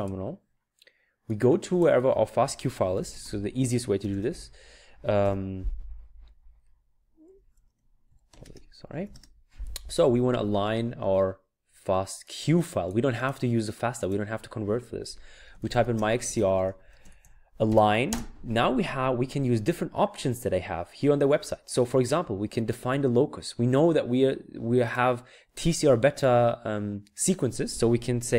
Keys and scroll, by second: 2.7-5.2 typing, 7.3-9.5 typing, 15.1-18.2 typing.